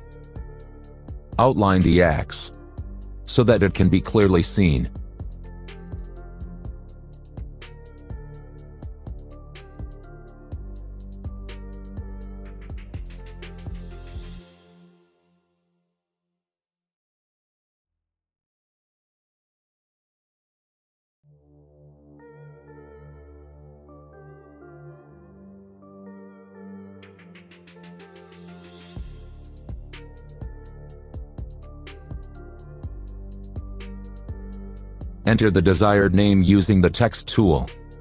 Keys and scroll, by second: 32.0 a.